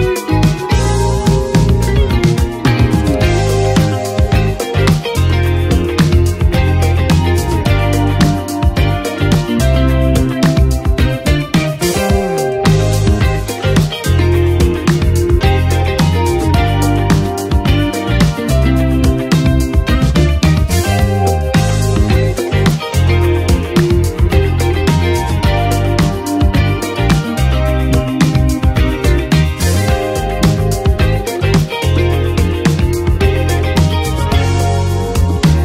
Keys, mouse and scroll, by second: 2.4 Page_Down, 4.7 Page_Down, 4.8 shift+click, 5.9 ctrl+d, 8.5 click, 9.1 s, 11.8 s, 13.0 click, 13.4 s, 14.2 right click, 15.9 right click, 16.2-32.2 drag, 33.2 ctrl+d, 34.6-35.6 drag.